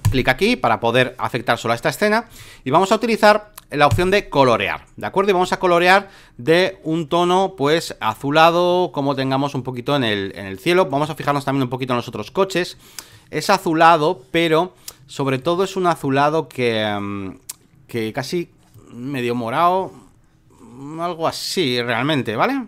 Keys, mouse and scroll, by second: 0.0-2.0 drag, 3.9-12.8 drag, 13.1-22.6 drag.